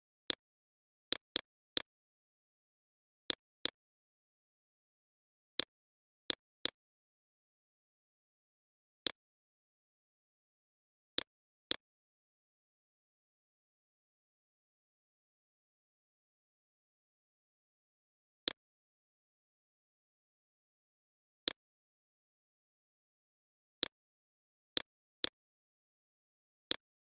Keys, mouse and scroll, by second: 6.1 alt+click, 7.0 click, 12.9 shift+Down, 13.9 click, 17.1-17.9 scroll up 3, 17.9 click, 22.6 alt+click, 23.5-27.1 drag.